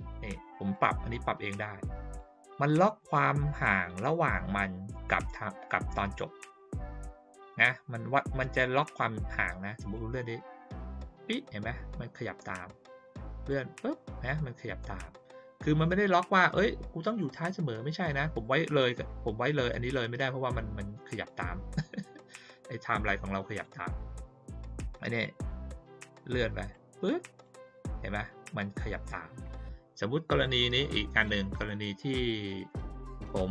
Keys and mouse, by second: 0.7-2.1 drag, 9.9-10.9 drag, 12.8-13.5 drag, 16.1-21.2 drag, 22.9 click, 26.7 click, 31.1 click.